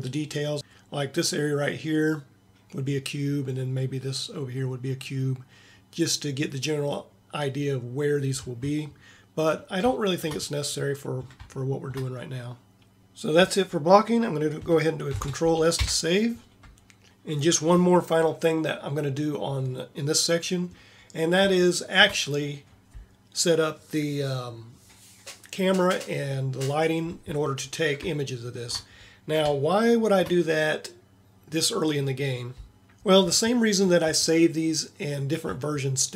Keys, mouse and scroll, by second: 0.6 d, 15.2 ctrl+s.